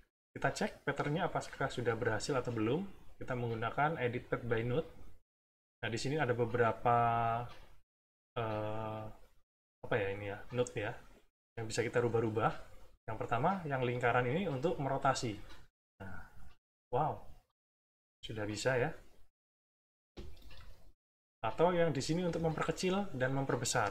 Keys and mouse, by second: 1.3 click, 14.5-20.8 drag, 22.0-23.9 ctrl+drag.